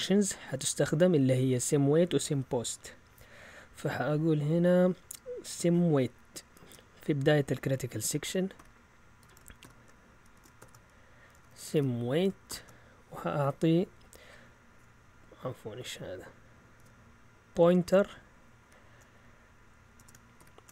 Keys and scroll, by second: 6.5 Return, 8.1-12.5 typing, 16.8 Delete, 18.6 shift+4, 20.0 BackSpace, 20.3 shift+7.